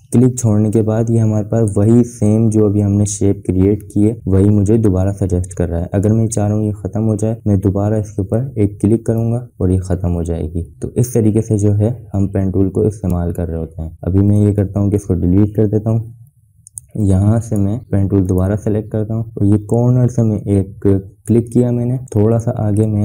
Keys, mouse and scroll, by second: 9.0 click, 14.0 click, 15.5 BackSpace, 17.0 click, 21.3 click.